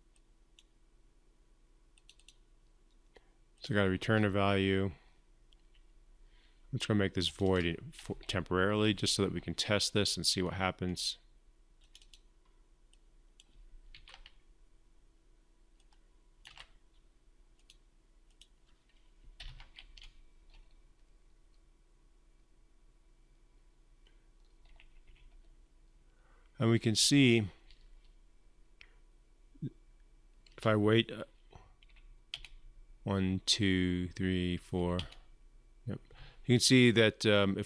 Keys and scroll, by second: 13.7 ctrl+c, 16.3 ctrl+v, 19.2 ctrl+F5.